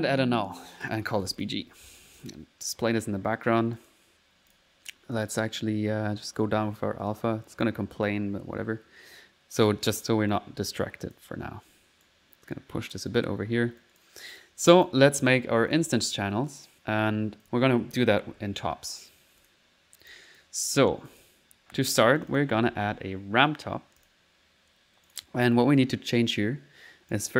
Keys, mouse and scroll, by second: 0.2-1.4 alt+drag, 2.2 click, 3.4 middle click, 3.8 click, 4.5 click, 5.2 click, 6.4 click, 7.5 click, 9.0 middle click, 10.3 click, 11.7 right click, 12.5 click, 13.8-15.2 drag, 15.3 middle click, 15.7 click, 22.2 click, 22.4-23.2 typing, 22.5 click, 23.5 click, 24.0 click, 25.1 click, 27.1 click.